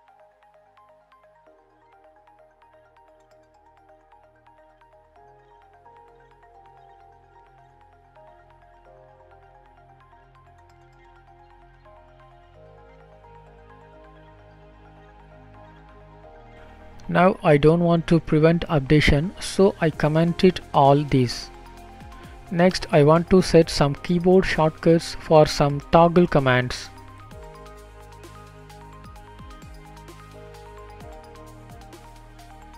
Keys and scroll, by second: 3.0 ctrl+space, 3.9 BackSpace, 5.3 ctrl+space, 13.8 Return, 16.2 shift+Up, 17.1 shift+Home, 18.5 ctrl+/, 19.7 ctrl+s, 20.5 Right.